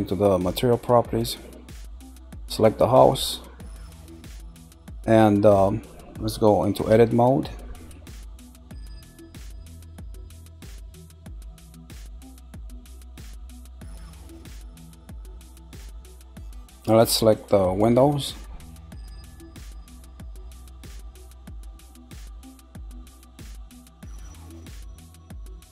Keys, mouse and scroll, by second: 0.7-1.7 scroll down 1, 1.7 click, 3.9 click, 5.4 scroll up 2, 6.9 Tab, 8.2 scroll down 2, 9.4 middle click, 10.3-10.8 scroll up 4, 11.2-14.3 shift+middle drag, 14.3-15.0 scroll up 3, 15.4 click, 17.3 shift+click, 18.0 scroll down 2, 18.8-20.6 shift+middle drag, 20.6 click, 22.2 shift+click, 22.8 shift+click, 23.2 scroll down 2, 23.7-25.7 middle drag.